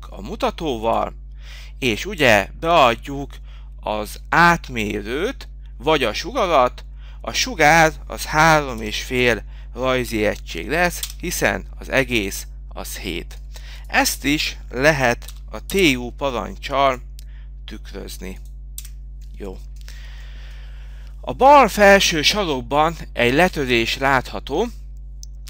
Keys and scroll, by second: 6.1 Down, 7.8 Return, 18.6 7.